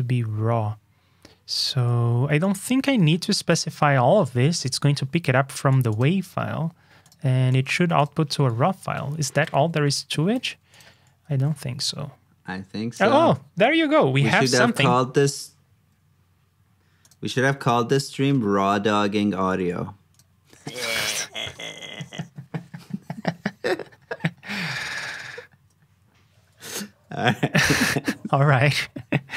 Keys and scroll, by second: 10.3 super+c, 11.2 super+v, 19.1 super+s, 26.8 super+s.